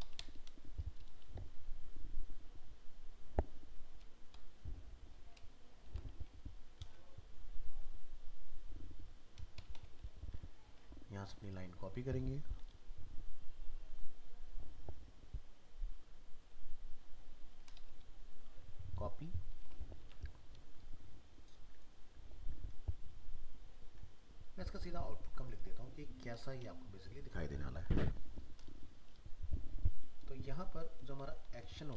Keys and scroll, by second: 5.9 ctrl+c, 6.8 ctrl+v, 20.0 ctrl+c.